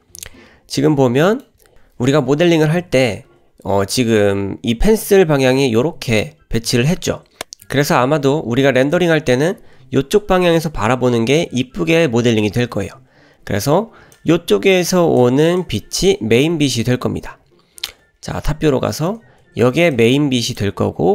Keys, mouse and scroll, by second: 0.9 middle click, 1.6 scroll up 1, 2.5 shift+middle click, 14.1-15.3 drag, 15.6 click, 17.6 scroll down 1, 17.8 `, 18.5-18.8 scroll down 2, 18.9 shift+middle click, 19.9 click, 20.8-21.1 scroll down 2.